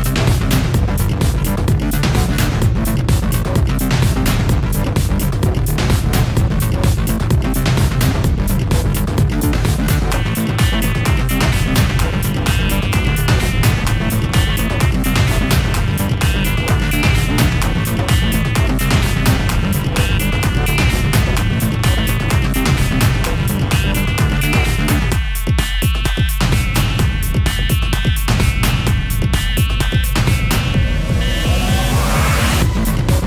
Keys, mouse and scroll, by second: 0.4 click, 6.0 click, 10.3 click, 11.6 click, 11.6 click, 14.6 click, 15.5 click, 16.5 click, 17.5 click, 18.4 click, 20.4 click, 21.2 ctrl+click, 22.7 click, 23.3 click, 25.3 click, 26.7 right click, 26.7 click, 27.8 click, 32.7 click.